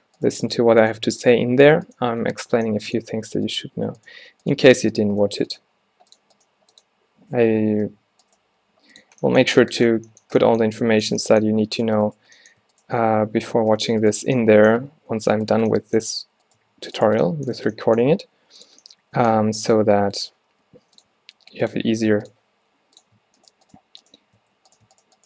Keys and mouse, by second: 3.2 f, 5.3 f, 5.8 g, 6.5 g, 7.6 ctrl+z, 7.9 ctrl+z, 8.6 g, 11.9-12.4 drag, 12.4-14.8 right drag, 13.8 f, 14.8 g, 16.8 alt+w, 18.1 g, 19.5 e, 20.6 g, 22.7 g, 23.5-24.5 right drag, 24.5 f.